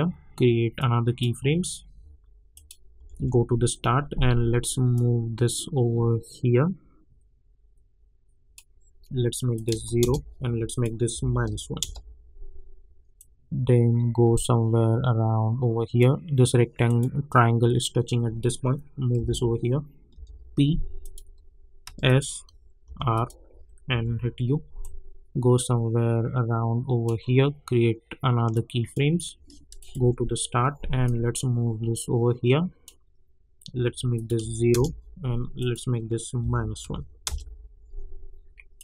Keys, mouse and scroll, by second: 3.0 j, 3.1 j, 4.9-9.5 drag, 10.0 Return, 10.6 click, 11.8 Return, 13.1-16.8 drag, 19.1 [, 20.1 p, 21.0 click, 21.8 s, 22.0 click, 22.8 r, 23.1 click, 23.9 u, 24.8-29.8 drag, 30.0 j, 31.0-34.1 drag, 34.7 Return, 35.6 click, 37.2 Return, 38.7 click.